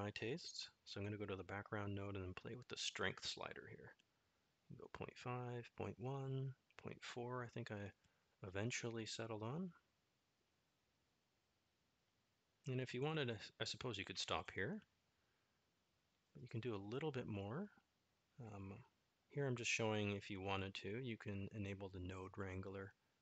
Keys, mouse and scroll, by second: 2.1 click, 2.8-6.8 drag, 7.7-16.5 drag, 18.0-19.3 middle drag, 21.6-23.2 drag.